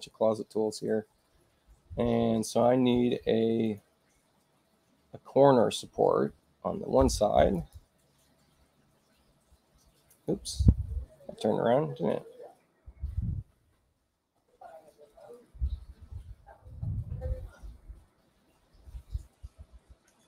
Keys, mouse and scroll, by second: 3.6 click, 7.3 click, 10.1 click, 11.2 space, 12.0 space, 13.4 click, 15.3 click, 16.5-17.8 drag.